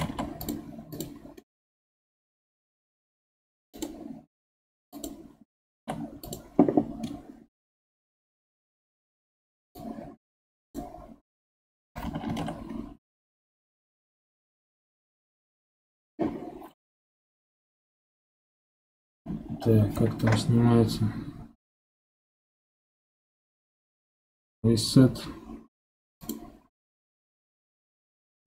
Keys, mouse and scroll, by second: 0.0 ctrl+Tab, 0.9 click, 1.2 scroll down 2, 1.4-2.4 middle drag, 2.4 g, 4.1-4.9 scroll up 6, 4.9 click, 5.7 ctrl+Tab, 7.0-8.2 middle drag, 8.2 scroll down 2, 9.7 click, 12.3 ctrl+h, 17.4 alt+h, 19.5 ctrl+h.